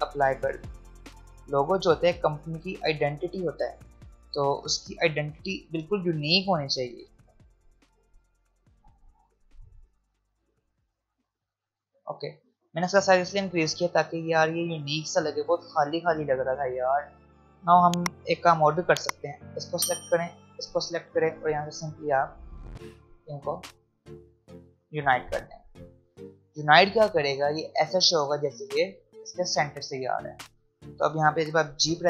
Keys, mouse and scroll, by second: 0.6 alt+scroll up 1, 1.3 alt+scroll down 1, 3.9 alt+scroll up 1, 4.8-6.4 alt+scroll up 1, 7.0 click, 8.5-10.3 drag, 11.7 alt+scroll down 1, 12.4 alt+scroll up 1, 13.2 space, 13.4 click, 13.7 space, 14.5-15.1 alt+scroll up 1, 16.8-17.1 alt+scroll up 1, 17.2 click, 20.3 shift+click, 22.3 click, 23.6-24.1 alt+scroll down 1, 24.8-25.4 alt+scroll up 1, 30.3 click, 31.7 g.